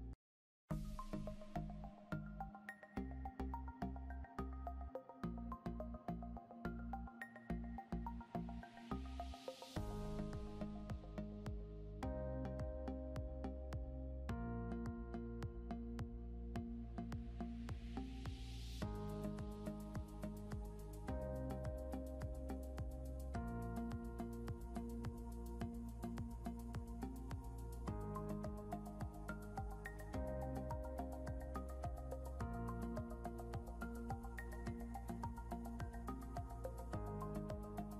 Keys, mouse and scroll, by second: 6.9 click, 11.4-13.2 typing, 14.8-17.5 typing, 18.7-23.6 typing, 28.8-30.7 typing, 31.8-34.6 typing.